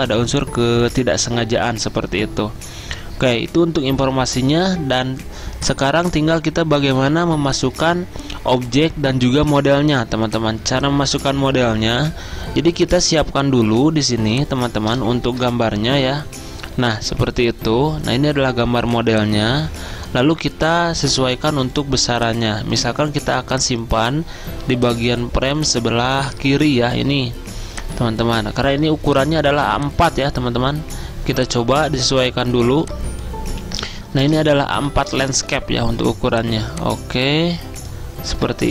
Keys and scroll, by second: 15.3 alt+Tab, 35.4 ctrl+z.